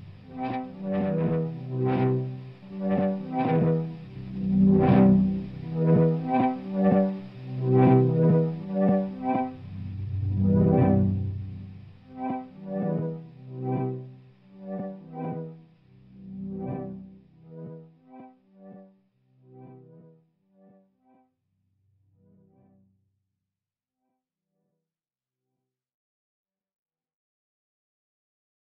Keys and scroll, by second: 0.0 shift+F2, 0.4 F9, 21.3 shift+F2, 21.8 F9, 28.3 ctrl+s.